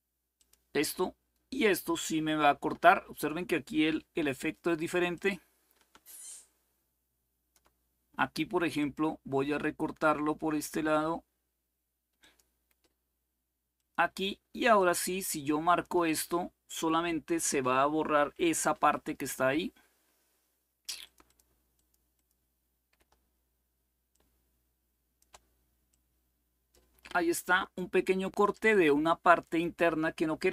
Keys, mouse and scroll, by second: 0.0 click, 4.8 click, 6.0-7.3 shift+drag, 8.5 click, 11.9 click, 13.4 click, 14.5-15.5 shift+drag, 18.9 Delete, 20.7-22.7 drag, 23.8-27.0 shift+drag, 27.4-28.8 drag.